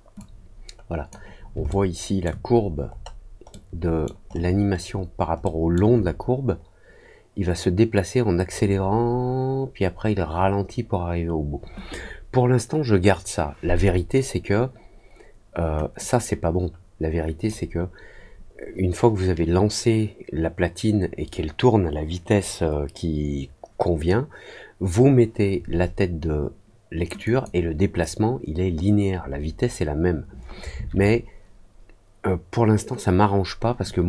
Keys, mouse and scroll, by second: 0.1 click, 1.6 alt+middle click, 2.5-3.0 alt+scroll up 2, 3.4 alt+middle click, 4.2-5.0 alt+scroll down 3, 5.4 alt+middle click, 15.9-17.4 drag, 27.2 click.